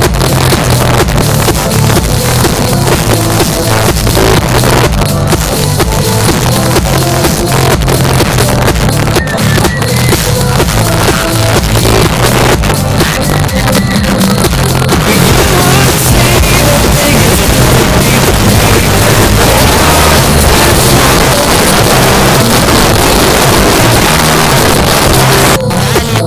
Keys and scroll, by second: 21.1 Page_Down.